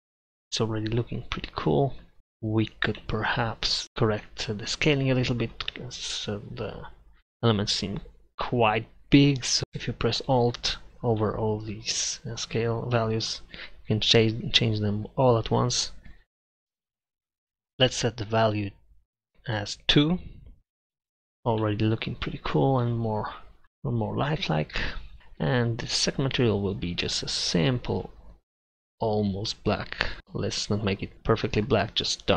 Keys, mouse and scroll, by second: 0.4-3.5 middle drag, 4.1 middle click, 10.5-12.1 drag, 25.2 middle click, 27.7-30.0 drag, 31.1-32.3 drag.